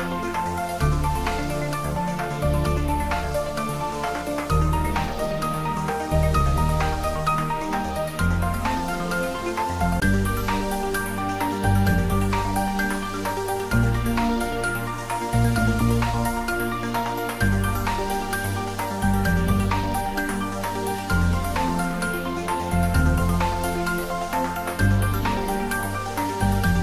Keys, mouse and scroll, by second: 6.2-6.7 scroll down 1, 7.2 click, 8.0 Tab, 9.1 z, 11.2 ctrl+b, 12.1 click, 14.3 click, 14.9-15.4 scroll up 1, 15.5 middle click, 16.5 click, 17.5 ctrl+z, 19.2 ctrl+b, 20.6 click, 24.8 click.